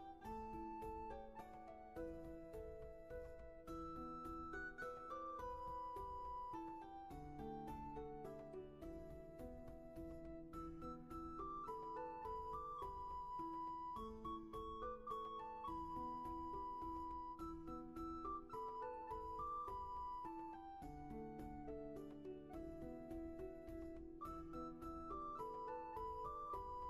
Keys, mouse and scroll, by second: 7.4 right click, 21.0 ctrl+z, 22.8 ctrl+shift+z, 24.4 ctrl+z, 26.2 ctrl+z.